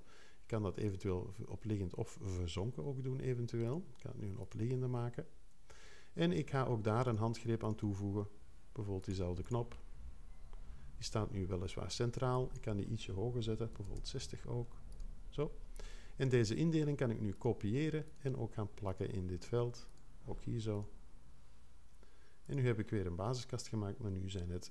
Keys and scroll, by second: 13.7 6.